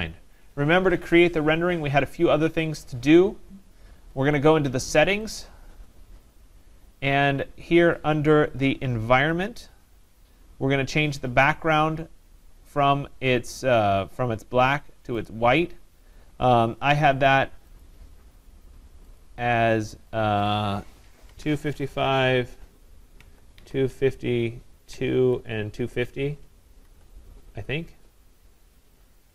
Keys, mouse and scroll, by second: 5.5 click, 9.5 click, 15.2 click, 17.8 click, 19.2 click, 20.4 click, 21.3 typing, 23.2 Tab, 23.3-27.3 typing.